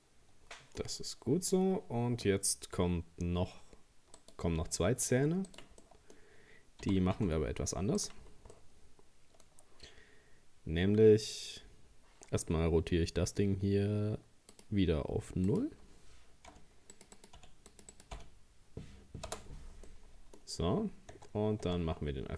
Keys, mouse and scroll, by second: 1.1-2.3 scroll up 2, 4.2 right click, 5.1 shift+d, 5.8-6.8 middle drag, 6.8 g, 8.3-8.6 scroll down 1, 8.6 middle click, 9.5-10.0 scroll up 2, 14.5-19.9 drag, 19.9 middle click, 20.5 scroll up 1, 21.1 Tab, 21.7 Tab.